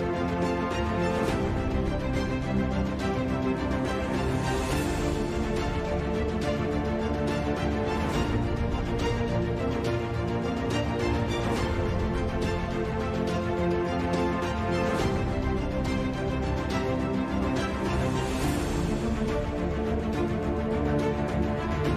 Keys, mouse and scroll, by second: 1.6 KP_5, 1.7 KP_Divide, 2.3 KP_5, 2.4 Tab, 3.5 KP_Divide, 4.6 KP_Divide, 5.4 ctrl+z, 6.0 b, 6.4 KP_Divide, 6.9 middle click, 7.3 ctrl+z, 7.9 KP_7, 8.2 KP_5, 8.9 Tab, 9.5 k, 13.4 s, 14.6 g, 16.5 ctrl+shift+b, 18.2 s, 19.6 s, 20.3 Tab, 20.7 Tab, 21.7-21.9 ctrl+z.